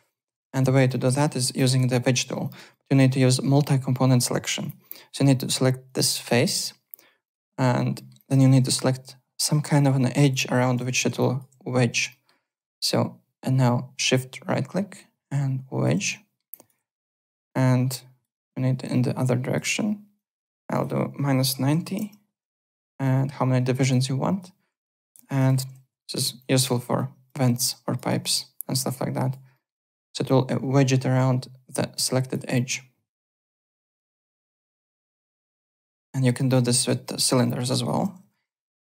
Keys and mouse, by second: 0.9 alt+click, 1.2 alt+middle click, 1.5 alt+click, 2.4 alt+click, 2.7 alt+middle click, 4.6 click, 5.8 click, 7.2 click, 7.9 alt+middle click, 8.1 alt+click, 10.9 alt+middle click, 11.2 alt+click, 12.1 alt+middle click, 12.8 shift+right click, 16.1 alt+middle click, 16.5 alt+click, 17.3 click, 18.8 click, 20.1 click, 20.7 click, 21.1 KP_Subtract, 21.7 KP_9, 21.9 Return, 21.9 KP_Enter, 22.6 click, 23.9 alt+click, 24.7 w, 25.0 alt+click, 25.2 alt+right click, 25.8 3, 26.0 click, 26.2 z, 26.4 alt+click, 26.7 alt+right click, 26.9 alt+click, 27.7 alt+click, 28.0 alt+middle click, 28.3 alt+click, 29.5 alt+middle click, 29.7 alt+click, 32.0 alt+click, 34.0 alt+right click, 34.3 alt+middle click, 34.5 alt+click, 35.3 alt+middle click, 35.7 click, 36.1 z, 36.5 alt+middle click, 36.7 alt+right click, 37.0 alt+middle click, 37.7 alt+right click, 37.8-38.7 typing, 38.6 alt+click.